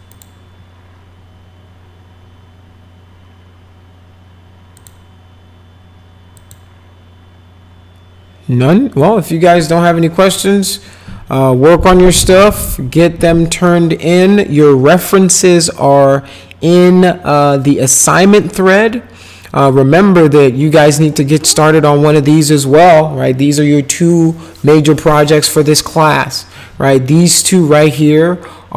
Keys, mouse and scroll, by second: 0.1 click, 4.8 click, 6.4 click.